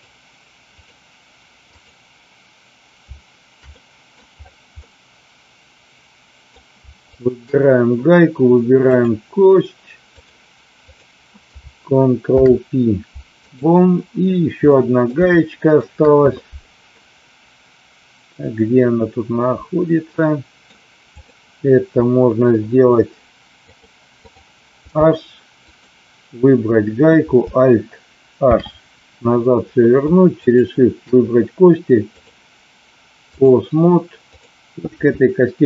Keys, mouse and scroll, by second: 0.7 click, 1.7 click, 3.7-4.1 middle drag, 4.8-6.4 middle drag, 7.1 shift+click, 8.8-10.2 drag, 10.8 click, 12.2 ctrl+p, 14.7 middle click, 15.4 shift+middle click, 16.9-20.7 middle drag, 21.2 click, 23.7-24.4 drag, 24.8 h, 25.7 click, 28.5 alt+h, 30.4 shift+click, 32.3-33.4 drag, 34.2 click.